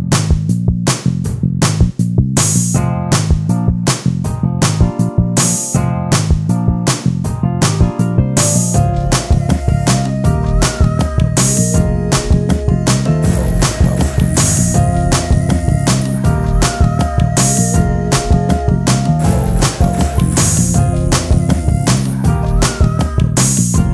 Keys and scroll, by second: 0.3 t, 1.7 m, 2.1 t, 4.1 d, 4.6 space, 5.0 t, 6.7 space, 7.6 s, 9.4 ctrl+z, 13.8 s, 16.2 space, 16.3 s.